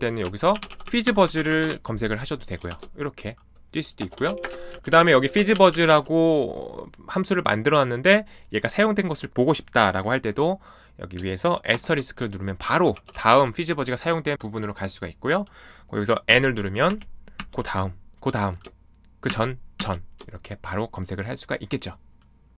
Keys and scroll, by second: 0.0-2.7 typing, 3.9 Escape, 4.0-7.0 typing, 11.7 *, 12.8 *, 12.9 ctrl+e, 16.3 n, 16.9 n, 17.3 n, 19.2 shift+n, 19.7 shift+n, 20.5 shift+n.